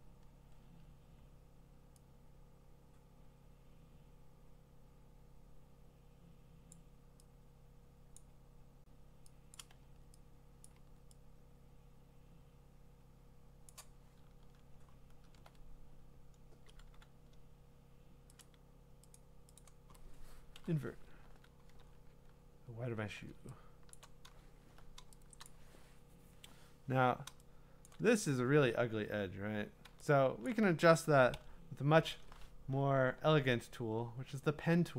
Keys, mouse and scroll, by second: 6.7 click, 8.2 click, 9.5 click, 9.8 x, 10.7 click, 10.8 x, 14.2-15.7 scroll, 16.9 q, 18.4 click, 19.1 click, 19.6 click, 20.5 ctrl+i, 21.2 ctrl+d, 21.8-23.0 scroll, 23.9 click, 24.3 scroll, 25.5 click, 27.8 click, 27.8 click, 27.9 click, 30.1 click, 30.5 click, 31.3 p.